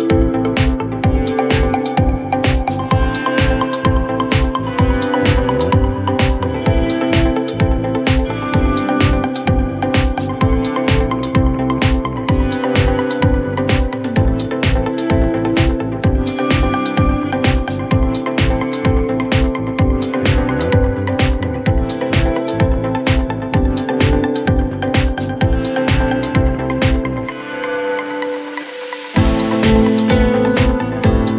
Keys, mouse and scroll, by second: 0.1-1.0 typing, 2.1 Return, 2.8-3.5 typing, 5.1 click, 6.9 click, 7.6-8.5 typing, 9.6 click, 11.7 click, 12.9 click, 14.5 u, 16.1 click, 16.3-17.5 typing, 18.5 click, 19.1-19.9 typing, 19.3 click, 20.0 click, 21.7-22.9 typing, 24.7 click, 25.8 click, 26.6 click, 28.1 click, 28.5-29.6 typing, 31.0 click.